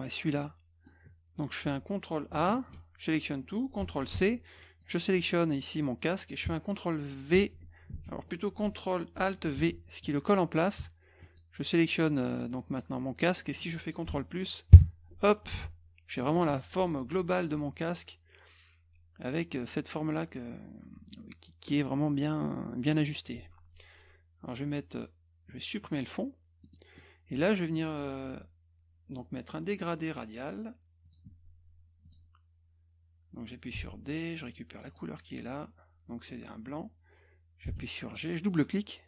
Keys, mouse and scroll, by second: 0.4 middle click, 2.5 ctrl+a, 4.1 ctrl+c, 4.8 click, 7.3 ctrl+v, 7.9 ctrl+z, 9.5 ctrl+alt+v, 11.2 shift+click, 12.7 click, 15.5 F1, 25.8 click, 26.6 middle click, 27.0 middle click, 31.1 click, 32.1 click, 33.7 d, 34.9 click, 37.7 g.